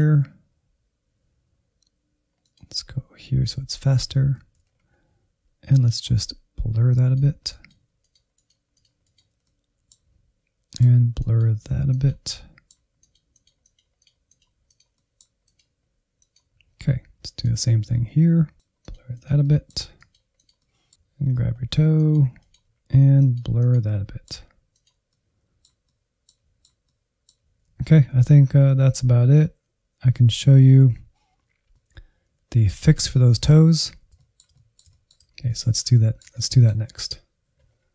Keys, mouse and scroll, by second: 0.5-3.3 ctrl+drag, 3.3-4.3 middle drag, 4.3 alt+z, 4.6 scroll up 3, 5.5-7.3 drag, 7.3 middle click, 7.8 click, 8.4 middle click, 8.8 click, 9.4 middle click, 10.1 ctrl+click, 10.3 middle click, 10.8 click, 11.2 middle click, 11.6 click, 12.5 middle click, 12.7 click, 13.5 middle click, 13.9 click, 14.4 middle click, 14.8 click, 15.1 middle click, 16.0 click, 16.4-17.0 scroll down 2, 17.0 ctrl+click, 17.3 middle click, 17.7 click, 18.2 middle click, 18.6 click, 19.0 middle click, 19.2 click, 19.6 middle click, 20.2 click, 21.1 scroll up 4, 21.4 click, 21.6 middle click, 22.0 scroll down 1, 22.3 click, 22.6 middle click, 22.9 click, 23.1 middle click, 23.8 click, 24.0 scroll down 2, 24.1-25.8 middle drag, 25.8 scroll down 1, 25.9 shift+middle click, 26.5 scroll up 2, 26.6 middle click, 27.3 Right, 27.5 Left, 27.6-28.4 Left, 28.8-31.0 drag, 31.2 middle click, 32.1-32.8 Right, 33.0 scroll down 2, 33.2-34.3 middle drag, 34.3 click, 35.0 scroll down 1, 35.3 middle click, 36.1 scroll down 3, 36.2-37.9 middle drag.